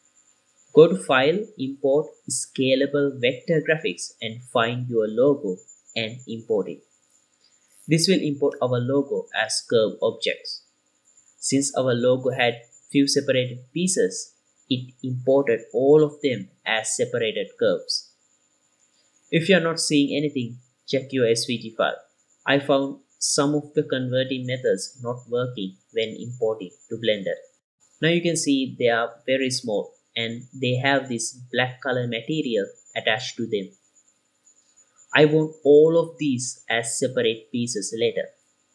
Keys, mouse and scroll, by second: 9.9-12.0 drag, 12.5 click, 14.2 a, 15.5 KP_Decimal, 16.8-17.3 scroll down 1, 17.3-18.0 middle drag, 17.3-18.0 scroll down 2, 18.6-19.0 scroll up 2, 19.0 drag, 19.6 click, 29.8 click, 31.2 click, 36.4-38.4 middle drag.